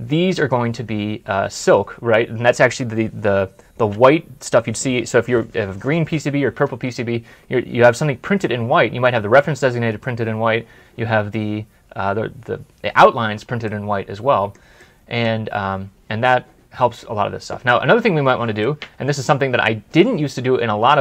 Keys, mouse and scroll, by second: 13.5 middle click, 18.5 middle click.